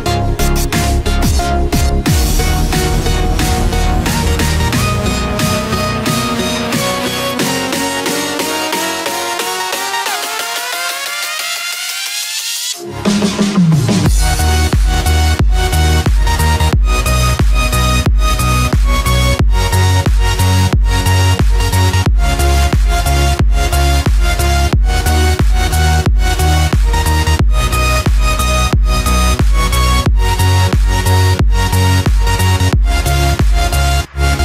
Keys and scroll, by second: 0.2 ctrl+f, 2.5 ctrl+z, 11.1 ctrl+d, 17.7 ctrl+f, 18.2 ctrl+d, 23.5 ctrl+f, 23.8 ctrl+d, 24.4 ctrl+-, 25.4 ctrl+=, 31.1 ctrl+f, 31.4 ctrl+d.